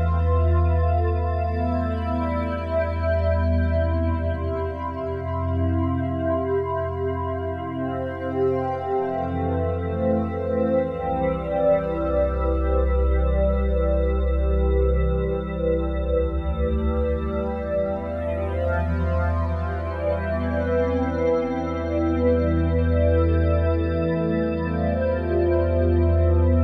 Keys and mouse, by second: 1.8 right click, 2.9 click, 4.4 ctrl+alt+click, 4.7 alt+click, 5.9 click, 6.8-7.1 typing, 8.5 Escape, 9.8 click, 10.4 click, 11.6 shift+click, 12.3-12.7 typing, 15.6 Escape, 16.2-18.1 ctrl+alt+drag, 17.4 ctrl+s, 18.1 /, 19.1-26.0 alt+drag.